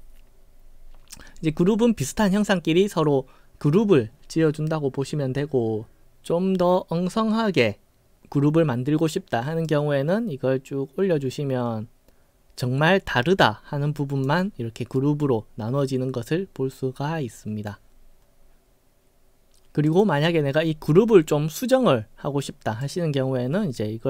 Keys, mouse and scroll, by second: 9.8-14.3 drag, 15.0-17.7 right drag, 19.9 click, 22.8-24.0 drag.